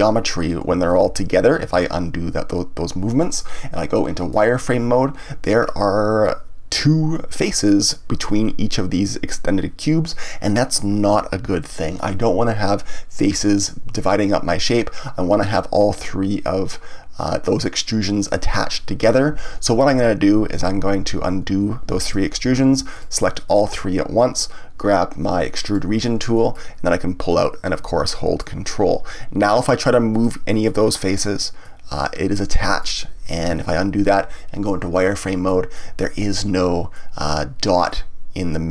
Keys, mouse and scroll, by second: 0.7 ctrl+z, 4.3 click, 5.6-7.4 scroll up 1, 7.4-10.4 middle drag, 11.6-14.6 shift+middle drag, 18.2 click, 20.4 ctrl+z, 22.9 shift+click, 23.4 shift+click, 25.6 click, 26.3 middle click, 27.3-29.6 drag, 30.1 click, 30.6 middle click, 31.6-33.5 drag, 33.5 ctrl+z, 34.9 click, 35.4-38.7 middle drag.